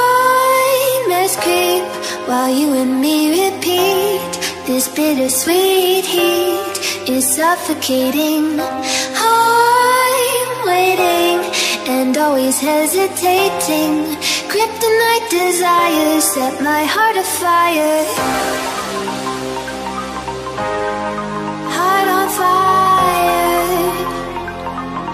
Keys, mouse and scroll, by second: 0.0 click, 0.4 alt+Tab, 2.1 click, 3.4 click, 5.7 shift+click, 6.6 Return, 8.7 click, 9.5 click, 13.2-13.8 scroll down 1, 14.2 click, 18.4 click, 20.3 Return, 21.8 click, 22.6-24.2 scroll down 1, 24.2 click.